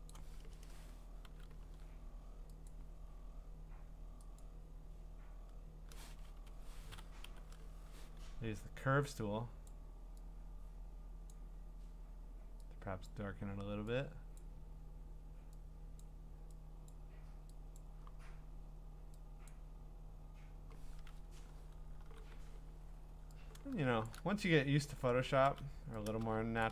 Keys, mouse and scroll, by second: 0.1 click, 0.6 Return, 1.2 ctrl+c, 2.7 click, 4.4 click, 6.2 Escape, 6.5 Escape, 7.2 ctrl+m, 9.7 click, 11.4 click, 13.1 click, 16.9 click, 17.8 click, 19.5 click, 21.1 Return, 22.0 g, 24.1 shift+click, 25.4 ctrl+z, 26.6 shift+click.